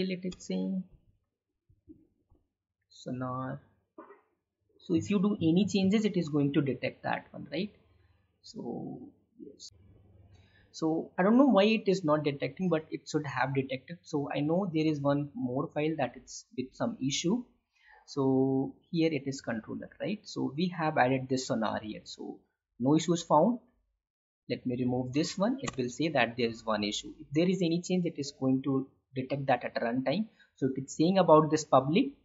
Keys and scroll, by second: 9.8 ctrl+shift+z.